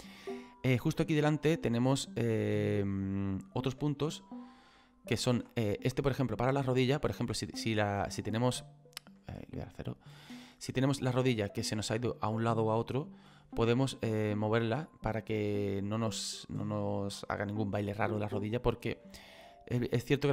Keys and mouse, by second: 0.4 middle click, 1.8 right click, 5.0 click, 5.7 middle click, 7.4 middle click, 9.3 KP_0, 10.4 middle click, 16.3 click, 19.1 click.